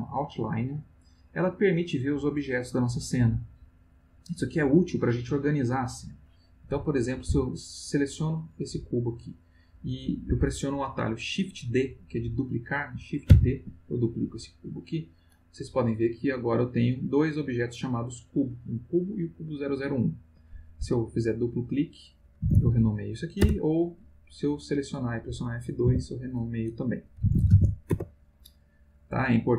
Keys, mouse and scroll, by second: 1.1 click, 7.6 click, 13.3 shift+d, 14.8 click, 16.3 click, 16.8 click, 17.2-18.5 drag, 18.8 click, 19.6 click, 21.3 click, 22.1-23.4 typing, 24.7 click, 25.8 F2, 26.9-28.1 typing.